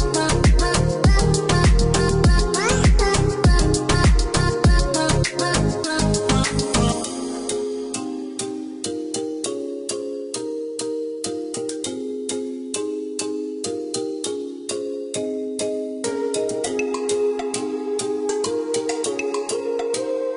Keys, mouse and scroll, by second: 0.8 click, 2.3 click, 3.1 Escape, 4.1 click, 5.5 click, 6.7 click, 8.3 KP_3, 8.5 KP_5, 8.8 KP_Enter, 9.3 Escape, 11.5 click, 13.5 click.